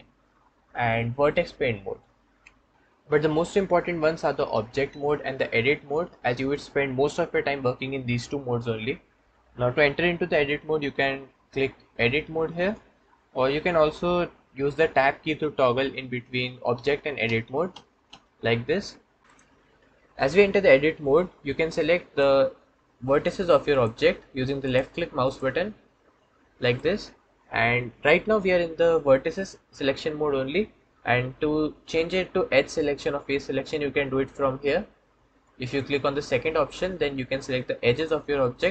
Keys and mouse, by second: 16.6 Tab, 17.1 Tab, 17.6 Tab, 18.0 Tab, 19.2 a, 24.5 click, 25.1 click, 26.6-35.6 drag, 37.8 click.